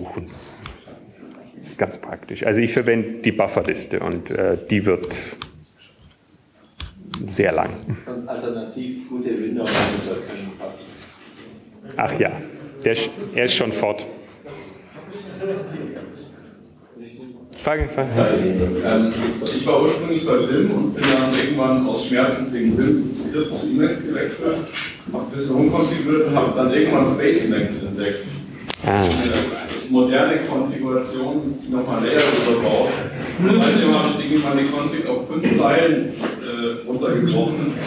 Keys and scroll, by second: 1.0 ctrl+s, 2.3-3.6 typing, 4.2 Up, 4.7 Up, 7.1-8.5 typing, 9.6 typing, 11.2 typing.